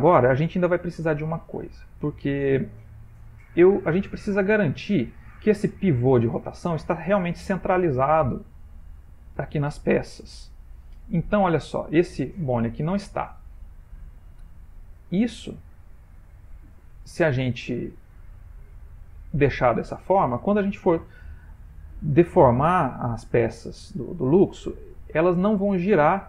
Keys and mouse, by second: 0.9 shift+middle click, 1.7 middle click, 6.1 middle click, 7.8 middle click, 11.5 middle click, 13.4 middle click, 13.9 shift+middle click, 15.9 click, 16.8 ctrl+middle click, 17.0 ctrl+middle click.